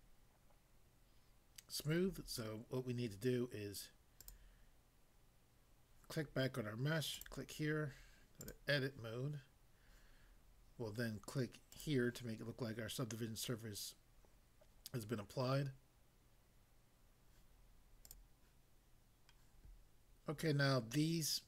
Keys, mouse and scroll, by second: 4.2 click, 7.1 click, 8.4 click, 11.7 click, 18.0 click, 18.6 click.